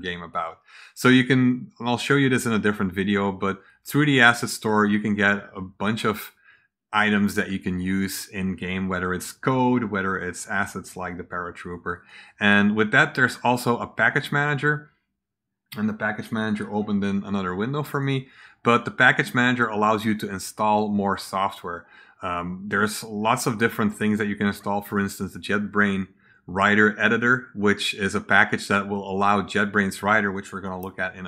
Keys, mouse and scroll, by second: 3.6 click, 11.8 click, 13.9 click, 16.3-17.9 drag, 23.8 click, 24.8 click, 27.9 click.